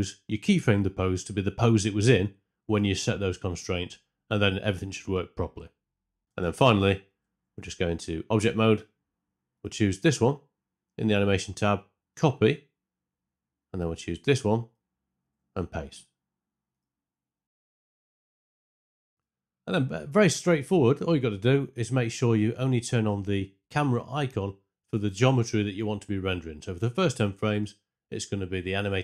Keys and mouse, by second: 0.9 Tab, 3.2 Tab, 3.7 a, 4.3 ctrl+v, 5.1 i, 6.2 shift+Left, 6.2 space, 7.5 Tab, 9.5 click, 11.1 click, 14.6 click, 15.8 click, 16.6 click, 20.0 drag.